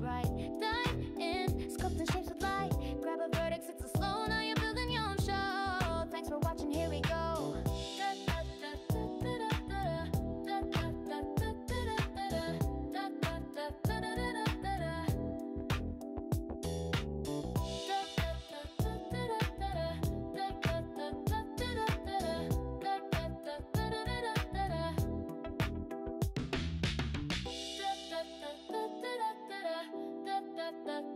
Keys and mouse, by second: 1.3 click, 2.3 g, 3.8 g, 5.1 click, 5.6 g, 8.1 click, 9.5 click, 11.6 shift+click, 12.6 f, 15.3 shift+click, 16.4 f, 21.4 click, 25.3 click, 27.8 click, 29.1 click, 30.4 g.